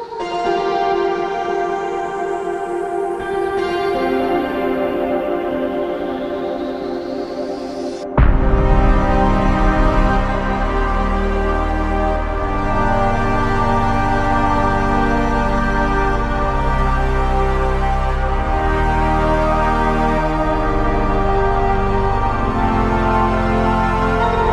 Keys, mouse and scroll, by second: 6.5 alt+click, 11.1-11.5 typing, 13.2 typing, 17.5 right click, 18.3 Tab, 19.4 typing, 21.0 typing, 23.4 typing.